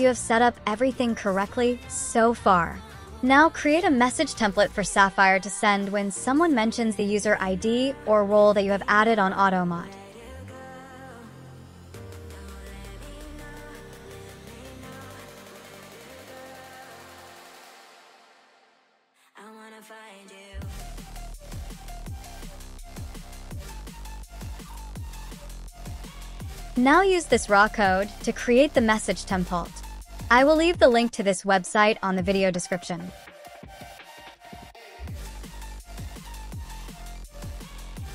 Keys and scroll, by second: 36.0 super+a, 36.4 super+v.